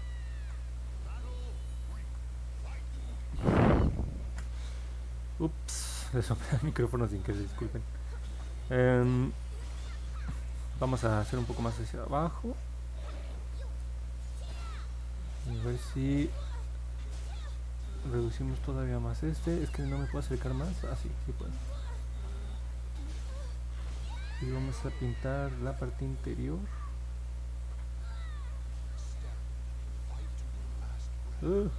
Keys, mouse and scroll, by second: 0.2 ctrl+z, 1.0 click, 1.8 ctrl+z, 4.2 ctrl+z, 19.4 middle click, 19.9 middle click, 20.3 middle click, 23.0 alt+click, 25.2-29.9 drag, 30.5 alt+click.